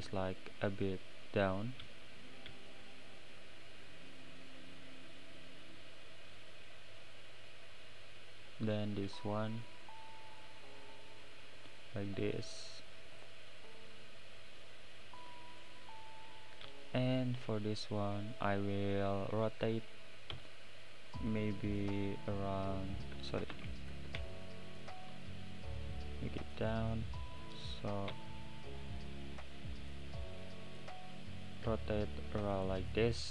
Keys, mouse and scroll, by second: 4.2 click, 7.0-7.9 middle drag, 7.9 click, 8.5 click, 10.3 click, 11.7 click, 12.2 click, 12.8 click, 13.2-13.7 middle drag, 13.7-14.0 scroll down 4, 14.0-14.4 middle drag, 14.4-15.2 right drag, 15.2 click, 20.3 r, 23.5 ctrl+z, 24.3 shift+click, 24.7 shift+click, 25.7 click, 28.1 r, 32.3 click.